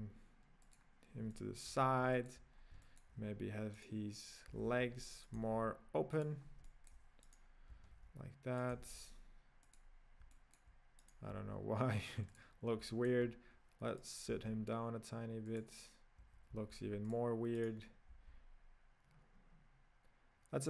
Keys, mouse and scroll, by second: 1.3-1.7 shift+middle drag, 1.7-2.2 scroll down 2, 2.2-2.5 middle drag, 2.5-2.8 scroll down 2, 2.8-3.3 shift+middle drag, 3.3-3.9 scroll up 2, 3.9-4.6 right drag, 4.6 g, 5.6 g, 6.5 scroll down 1, 6.7-7.4 shift+middle drag, 7.4 right click, 7.9 g, 8.9 g, 10.3-11.2 middle drag, 11.2 right drag, 11.5 g, 12.8-14.2 middle drag, 14.2 right click, 14.4 g, 16.7 g, 17.7 right click, 18.2 r.